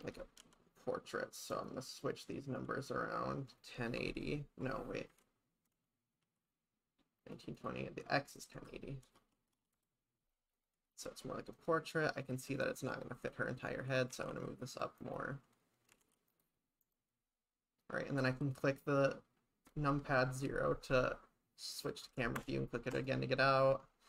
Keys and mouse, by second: 2.5-7.4 drag, 7.6-10.3 drag, 10.6 click, 11.5 click, 14.1 g, 14.4 z, 15.0 click, 15.9 g, 16.0 z, 16.3 click, 16.8 KP_0, 22.4 KP_0, 22.9 KP_0.